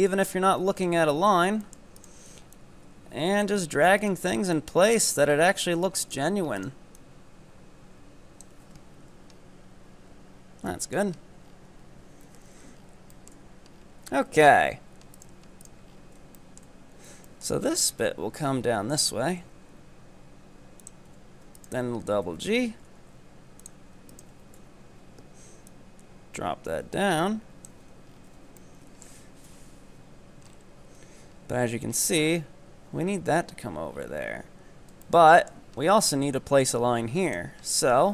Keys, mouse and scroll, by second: 0.1-1.7 drag, 1.7 shift+middle click, 2.0 right click, 2.6-4.0 drag, 4.0 right click, 4.6 click, 5.2 z, 6.1 right click, 6.7 right click, 7.0-8.8 drag, 8.8 Tab, 8.9-10.0 scroll down 9, 10.0 Tab, 10.4 scroll up 2, 10.7-11.2 middle drag, 11.2 scroll down 4, 11.4 Tab, 12.3 KP_7, 12.8-13.2 scroll down 6, 13.2-13.7 shift+middle drag, 13.7 scroll up 6, 14.3 Tab, 15.2 right drag, 16.0-16.4 scroll down 6, 16.4-17.7 shift+middle drag, 17.7-19.1 scroll up 9, 19.1 e, 21.1 z, 21.6 right click, 22.3 g, 24.1 ctrl+right click, 24.6 KP_3, 25.7-27.9 drag, 27.9 Tab, 28.2 scroll down 5, 28.3 z, 28.6-29.5 middle drag, 29.5 KP_7, 29.9 z, 30.5 scroll up 6, 30.9 Tab, 32.0-32.9 scroll up 1, 32.9 z, 33.6-34.1 scroll down 8, 35.1 shift+middle click, 35.8-37.2 scroll up 7, 37.2-38.1 drag.